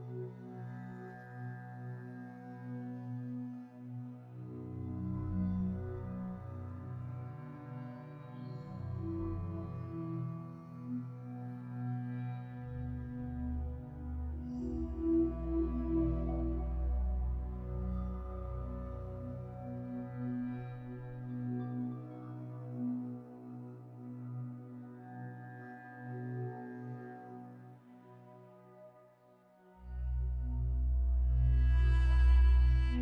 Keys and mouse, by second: 0.6 Tab, 1.9 alt+shift+click, 3.1 Tab, 3.6 Tab, 4.3 click, 5.2 click, 5.9 Tab, 6.3 Tab, 7.4 a, 8.6 Tab, 9.0 Tab, 11.1 2, 11.8 click, 12.8 ctrl+z, 14.1 click, 14.2 ctrl+z, 14.8 alt+shift+click, 17.2 p, 21.0 Tab, 22.0 click, 22.5 click, 23.1 s, 25.1 g, 31.3-31.7 shift+middle drag, 32.8 g.